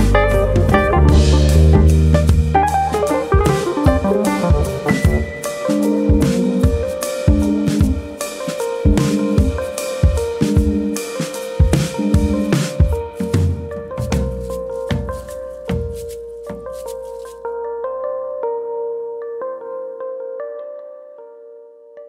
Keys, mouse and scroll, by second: 0.1 s, 1.5 right click, 2.1 s, 2.6 click, 4.5 s, 5.2 click, 5.7 click, 8.7 click, 9.6 click, 12.2 click, 12.6 Tab, 13.4 KP_Add, 14.2 KP_3, 14.8 scroll up 3, 15.2 shift+middle click, 15.9 click, 16.7 ctrl+KP_Add, 18.5 e, 19.2 click, 19.3 e, 20.4 click, 20.6 middle click.